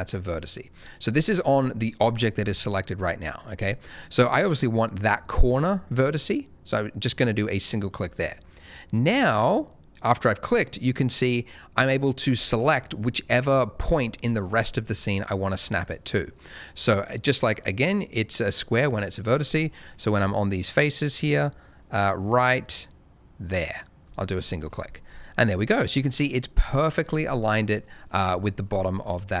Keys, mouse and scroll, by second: 8.0 click, 24.0 click, 24.4 middle click, 24.6-25.5 scroll up 1, 25.5 middle click, 26.0-26.3 scroll up 1, 26.3 middle click, 26.7-27.1 scroll down 1, 27.2 middle click, 28.2-28.6 scroll up 1, 28.6 middle click, 29.0-29.4 scroll up 1.